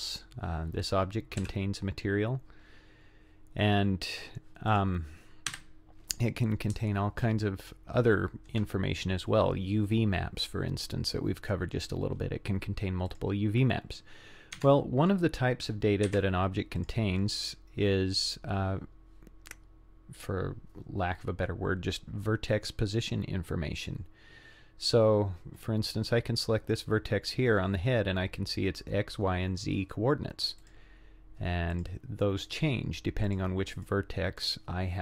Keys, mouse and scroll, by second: 1.4 z, 4.7 click, 5.5 Delete, 6.8-8.5 shift+middle drag, 13.1 click, 14.6 Tab, 16.1 1, 16.8 click, 18.1-18.4 scroll up 5, 18.9 scroll down 3, 19.5 scroll up 3, 30.6 click, 31.7 click, 32.5 click, 33.3 click, 33.8 click, 34.4 click.